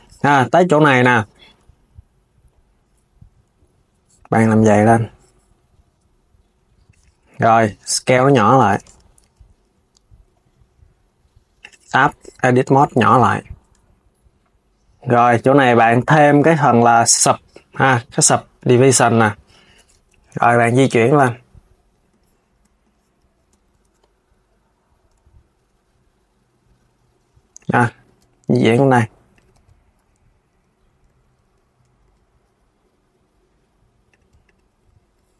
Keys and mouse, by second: 5.6-8.5 drag, 8.5 Tab, 13.4 Tab, 15.2-18.2 drag, 19.6 KP_3, 20.3 g, 29.2 KP_1, 30.8 alt+g, 31.1 KP_3, 31.7 g, 34.1 click.